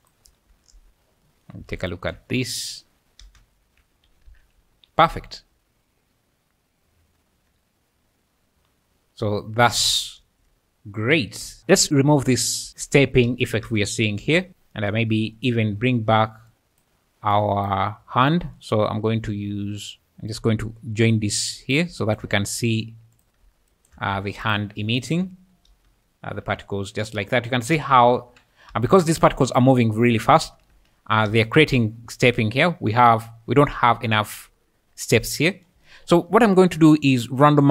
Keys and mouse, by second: 0.2 `, 1.8 ctrl+shift+click, 3.2 space, 3.6 `, 4.3 alt+a, 4.6 `, 5.1 `, 5.6-9.9 `, 11.6 `, 12.7 space, 13.2 space, 13.6 space, 14.1 space, 16.5 click, 17.3 click, 22.0 shift+click, 22.5 g, 23.1 click, 23.7 shift+click, 24.1 g, 24.4 click, 25.0 shift+click, 25.7-28.7 typing, 30.4 space, 30.7 space, 31.2 space, 32.2 `, 36.9 middle click.